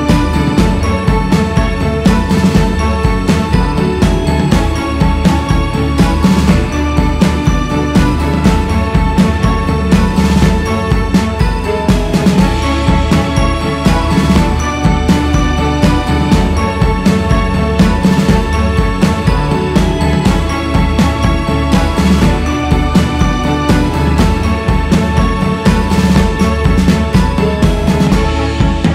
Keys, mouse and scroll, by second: 0.0 click, 2.3-5.5 drag, 10.4 shift+z, 10.5-11.1 scroll down 2, 11.2-11.9 scroll down 5, 11.9-12.5 scroll down 4, 13.0 shift+z, 13.5-13.8 scroll down 3, 14.3-15.9 scroll up 13, 15.9 x, 16.2 scroll up 3, 16.8-18.2 drag, 18.2-19.4 scroll down 8, 18.6 alt+shift+z, 19.5-20.4 scroll down 8, 20.4-21.4 scroll up 6, 21.4 s, 22.5 shift+s, 23.1-23.8 scroll up 3, 23.8 f, 25.2-28.9 drag.